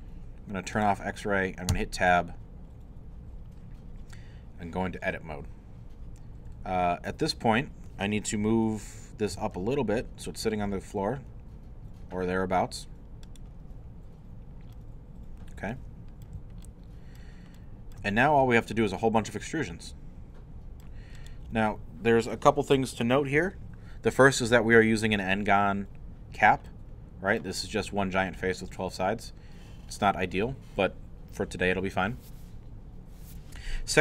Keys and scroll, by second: 1.7 Tab, 9.1-10.0 typing.